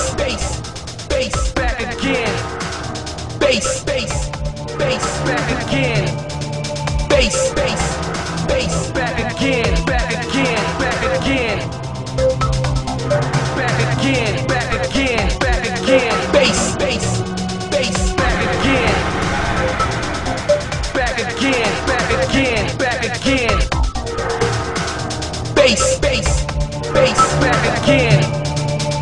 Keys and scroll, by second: 1.7 ctrl+z.